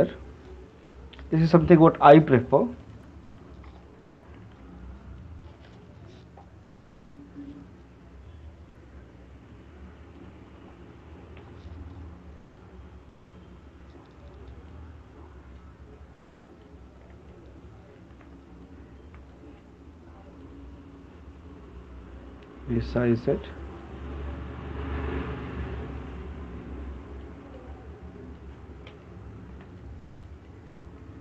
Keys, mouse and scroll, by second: 2.9 alt+click, 4.5 right click, 5.7 alt+click, 6.1-6.7 typing, 10.4 click, 11.4-12.1 typing, 14.9 click, 16.7 middle click, 19.3 click, 19.3 right click, 19.4 shift+click, 20.7 shift+click, 22.4 shift+click, 23.1 click, 24.8 shift+click, 28.3 click, 28.6 shift+click.